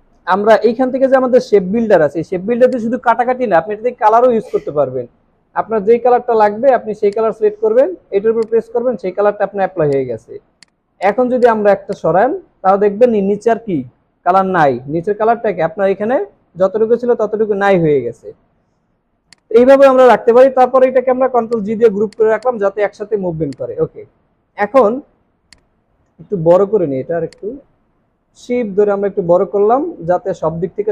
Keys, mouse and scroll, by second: 10.5 right click, 18.7 ctrl+z, 23.1 alt+scroll down 1, 23.4 space, 24.1 alt+scroll up 1, 24.5 alt+scroll down 1, 25.9 alt+scroll up 1, 30.0-30.6 scroll down 1.